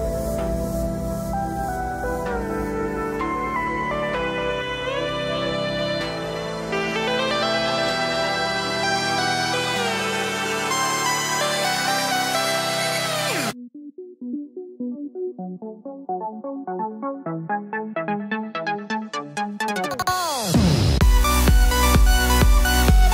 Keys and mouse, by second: 1.1 alt+z, 1.8 click, 2.2 shift+click, 2.3 shift+click, 2.9 shift+click, 4.4 shift+click, 4.9 s, 6.2 alt+z, 6.5-12.1 drag, 7.8 Tab, 8.9 ctrl+KP_7, 10.8 Tab, 11.1 alt+z, 11.4 alt+z, 12.1-13.7 shift+middle drag, 12.1 2, 12.2 shift+d, 12.7 alt+z, 13.5 d, 13.6-19.3 d, 13.7-21.1 drag, 18.3 shift+d, 19.4 shift+d, 20.8-23.1 typing, 21.1-23.1 shift+middle drag.